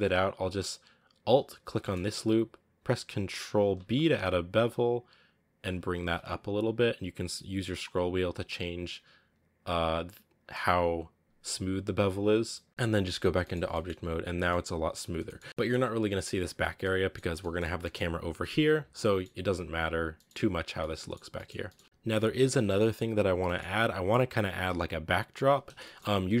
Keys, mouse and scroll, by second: 1.2 alt+right click, 1.7 middle click, 1.9 scroll up 1, 3.6 ctrl+b, 12.1 scroll down 2, 12.4 middle click, 12.7-13.0 scroll up 5, 13.3 middle click, 13.4 scroll down 2, 13.6-14.9 middle drag, 14.9 scroll down 1, 15.1 middle drag, 15.3-16.5 scroll up 3, 15.4 middle drag, 16.5 scroll down 2, 16.7-17.1 middle drag, 17.1 scroll down 3, 17.2-19.1 middle drag, 19.1-19.9 scroll up 3, 19.9 scroll down 2, 20.1-20.6 middle drag, 20.6 scroll down 2, 20.6-21.8 middle drag, 21.2 scroll up 1, 21.8-22.6 scroll up 1, 22.6-24.5 middle drag, 24.5-25.4 scroll up 1, 25.4 scroll up 1, 25.7-26.4 shift+middle drag.